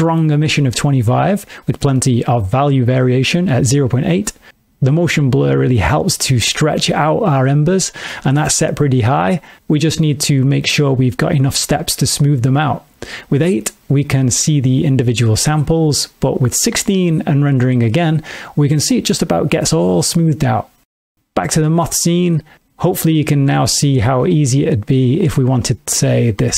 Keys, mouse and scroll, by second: 2.4 middle click, 4.9 click, 6.0 middle click, 9.7 click, 11.2 click, 12.8 F12, 16.4 click, 22.3 g, 24.5 click.